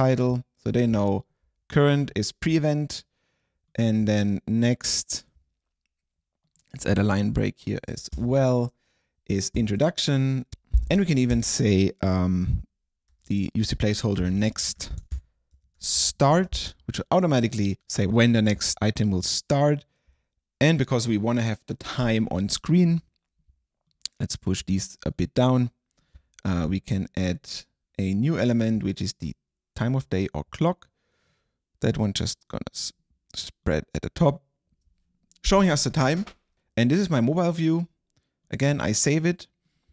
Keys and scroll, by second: 0.0-0.1 typing, 7.4 Right, 8.0 BackSpace, 8.2 Return, 9.6 super+Right, 10.5 BackSpace, 11.4 Return, 12.4 Return, 13.2-16.8 typing.